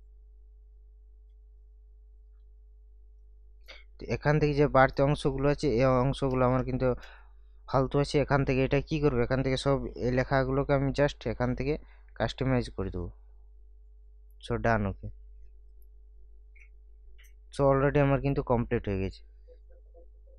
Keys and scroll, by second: 6.3 BackSpace, 9.9 ctrl+a.